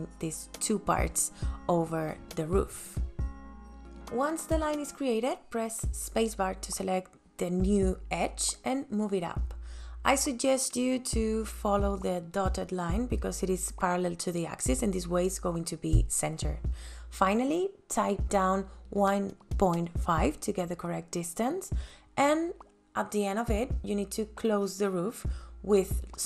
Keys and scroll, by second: 0.9 ctrl+s, 22.7 KP_1, 22.9 ,, 23.4 KP_Enter.